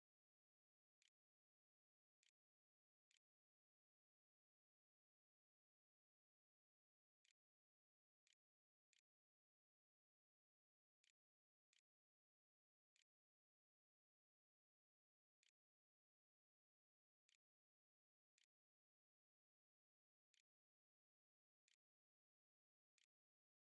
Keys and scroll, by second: 0.1 Return, 1.2 shift+Return, 1.5 shift+], 2.0 shift+[, 2.6 ', 2.8 Return, 3.7 ', 4.9-15.6 typing, 15.7 Return, 16.5 Return, 17.4-23.6 typing.